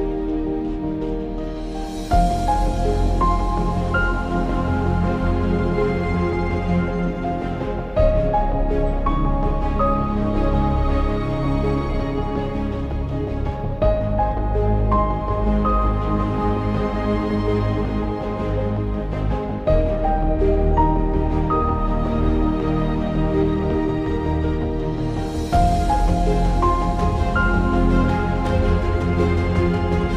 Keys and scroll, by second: 8.4 ctrl+=, 13.2 [, 13.4 [, 15.2 [, 15.4 [, 18.8 x, 28.6 x.